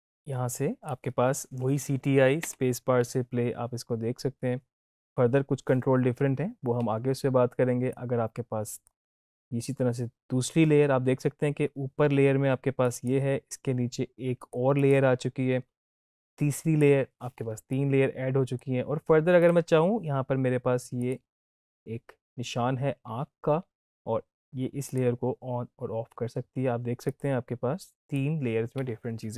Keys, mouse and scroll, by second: 2.3 space, 6.8 space, 7.9-9.1 drag, 24.8 click.